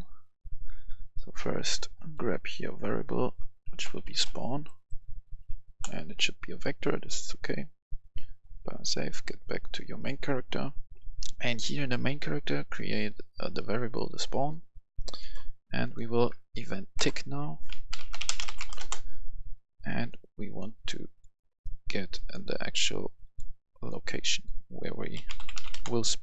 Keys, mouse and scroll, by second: 0.8 click, 3.6-5.3 typing, 5.6 Return, 7.3 click, 10.0 right click, 10.8 F11.